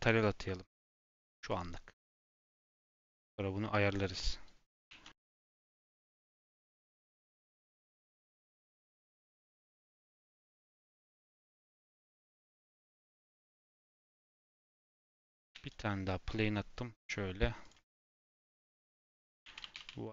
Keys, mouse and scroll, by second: 4.1 Tab, 4.8 shift+a, 5.8-6.1 scroll down 1, 6.1 s, 14.9-15.3 scroll up 4, 15.3 g, 18.7-20.1 drag.